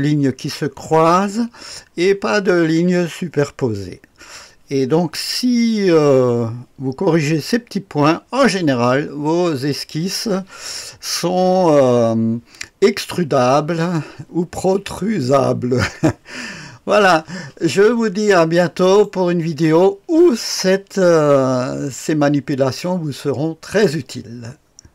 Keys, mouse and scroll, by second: 17.8-18.5 scroll down 1, 18.5-19.0 right drag.